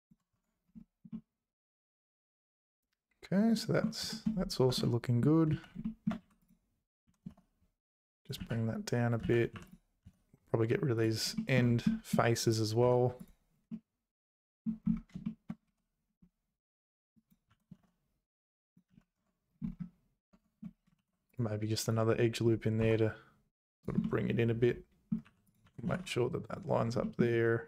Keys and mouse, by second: 0.3 Tab, 2.0 middle click, 2.9 middle click, 3.1 click, 4.1 shift+click, 4.7 Tab, 4.8 click, 5.0 middle click, 5.5 z, 5.8 shift+middle click, 6.2 2, 6.4 click, 7.0 g, 8.4 z, 9.2 z, 9.5 3, 9.6 click, 10.0 x, 11.3 shift+middle click, 11.9 middle click, 12.8 x, 14.1 middle click, 14.2 click, 15.2 shift+click, 16.7 1, 17.2 click, 17.5 g, 18.9 z, 19.2 Tab, 20.3 Tab, 21.0 ctrl+r, 22.8 s, 24.1-25.1 drag, 25.2 2, 25.6 g, 27.1 middle click.